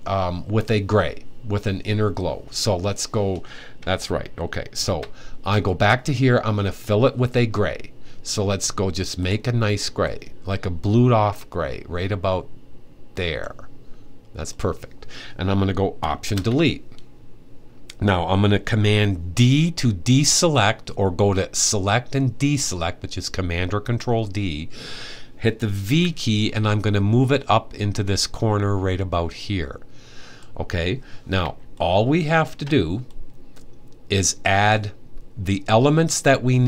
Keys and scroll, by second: 4.4 super+`, 25.5 v.